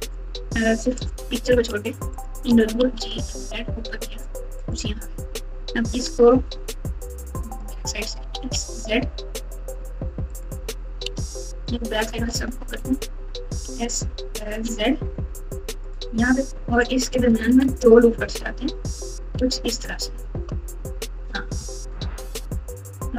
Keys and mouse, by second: 1.0 click, 2.8 g, 4.6 click, 6.1 Tab, 7.1 click, 8.1 s, 11.1 alt+z, 12.7 alt+z, 13.5 s, 17.4 ctrl+r, 22.3 KP_7.